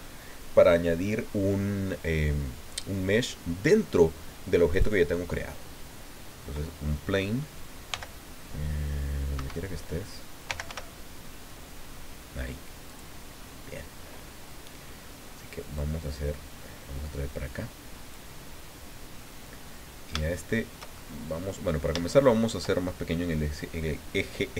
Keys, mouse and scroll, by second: 4.7 click, 5.3-7.9 scroll down 1, 7.9 g, 9.3 Escape, 9.8 scroll down 1, 10.2-11.2 typing, 12.8 click, 13.4-15.7 scroll up 1, 15.7-18.3 drag, 19.5 middle click, 20.3 shift+middle click, 21.3 middle click, 21.9 shift+click, 24.3-24.5 typing.